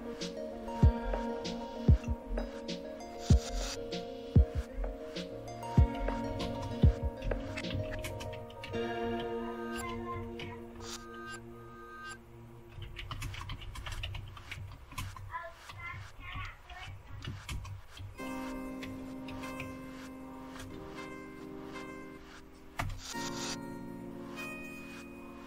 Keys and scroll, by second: 0.5 ctrl+o, 1.4 Return, 3.7 ctrl+x, 5.7-10.9 typing, 12.5-21.0 typing, 22.5-23.3 typing.